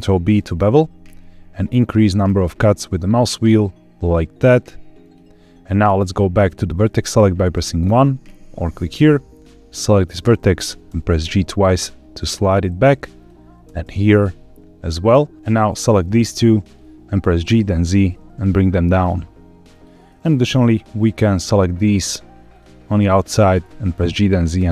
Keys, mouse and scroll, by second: 0.2 ctrl+b, 2.3-3.3 scroll up 1, 4.9 click, 7.4 1, 9.6 click, 10.6 g, 10.8 g, 12.1 click, 13.1 click, 13.5 g, 13.7 g, 14.8 click, 15.6 click, 16.3 shift+click, 16.7 middle click, 17.3 g, 19.6 click, 20.0 middle click, 21.3 click, 21.8 shift+click, 22.9 shift+click, 23.4 g, 23.5 z.